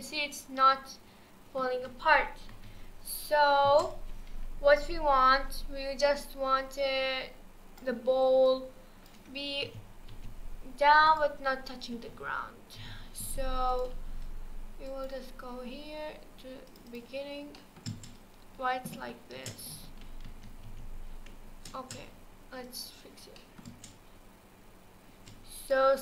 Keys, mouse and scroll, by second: 2.5 KP_1, 3.6 space, 6.2-8.5 drag, 9.6 g, 12.8 g, 14.9-17.5 drag, 17.5-17.9 middle drag, 17.9 space, 19.4 space, 20.3 ctrl+z, 20.7 ctrl+z, 21.7 space, 22.6-23.4 drag, 23.4 middle click, 23.7 space, 25.1 space, 25.6-26.0 drag.